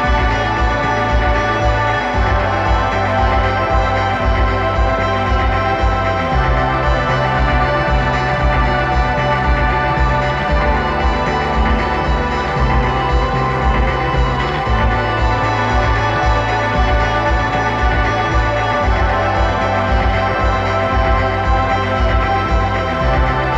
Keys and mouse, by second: 1.7-3.6 drag, 8.4-10.2 drag, 15.1-16.8 drag, 21.6 middle click, 22.5-23.5 middle drag.